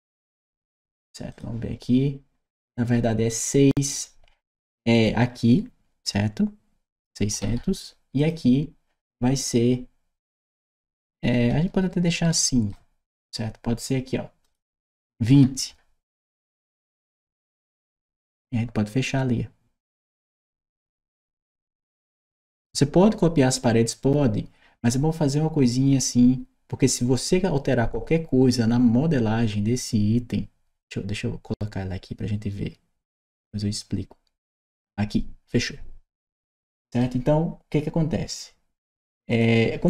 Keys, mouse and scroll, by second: 1.1 click, 4.8 click, 8.0 click, 10.6-12.5 right drag, 11.4 a, 12.3 s, 14.2 click, 15.2 2, 16.2 0, 17.1 Return, 20.4-22.0 right drag, 20.9 w, 34.6 click, 36.0 right click, 39.1 click.